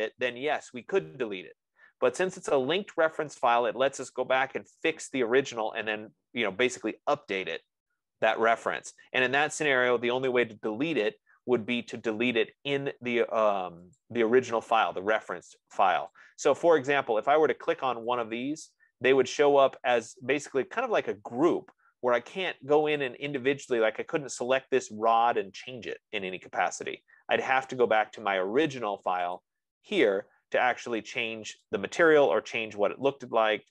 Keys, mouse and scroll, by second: 14.6-16.2 drag, 17.3 middle click, 18.6 click, 20.3 middle click, 20.5 middle click, 22.0 middle click, 23.5 click, 23.5-24.3 scroll, 29.9 click, 32.0 click.